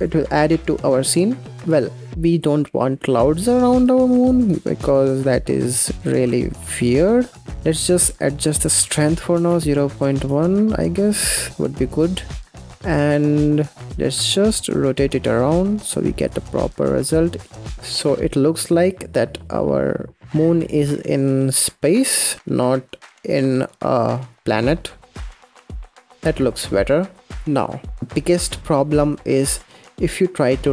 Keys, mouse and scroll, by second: 0.2-0.8 scroll down 5, 0.8-1.5 scroll down 3, 1.5-3.2 middle drag, 3.2-3.6 scroll down 3, 3.6 middle click, 4.0-5.1 scroll up 10, 5.1-7.4 drag, 7.4-8.4 middle drag, 8.4-11.6 drag, 12.5-25.0 drag, 26.4-27.0 scroll up 1, 27.0-27.3 scroll down 1, 27.3-27.6 scroll up 1, 27.6 shift+middle click, 28.0 KP_0, 29.2 click.